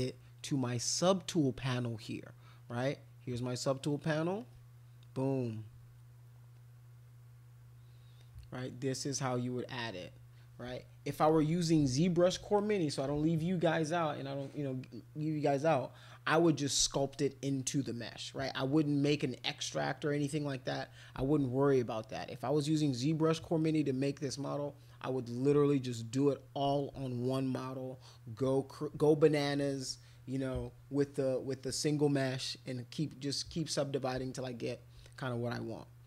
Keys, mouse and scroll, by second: 2.7 click, 3.6 click, 4.4 click, 6.6 click, 8.2 click, 33.6 click.